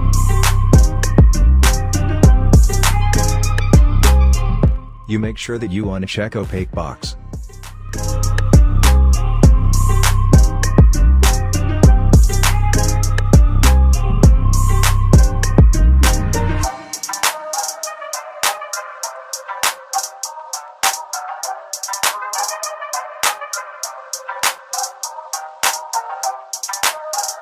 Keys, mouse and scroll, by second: 0.3 click, 14.2 click, 23.0-23.9 scroll up 1, 24.1 alt+middle click, 25.0-26.7 scroll up 1, 27.1 click.